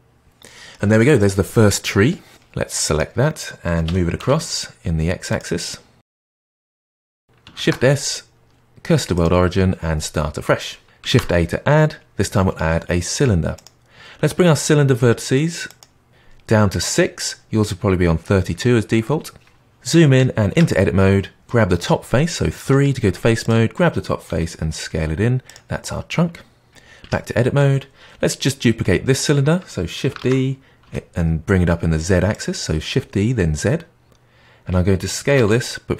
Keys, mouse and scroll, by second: 0.7-2.3 scroll up 1, 2.3 click, 3.8 g, 5.5-6.3 middle drag, 6.3 scroll down 1, 6.4-7.5 shift+middle drag, 7.5 shift+s, 11.0 shift+a, 15.6-17.2 drag, 20.5 Tab, 22.6 3, 23.3 click, 24.2 s, 26.9 Tab, 30.1 shift+d, 35.3 s.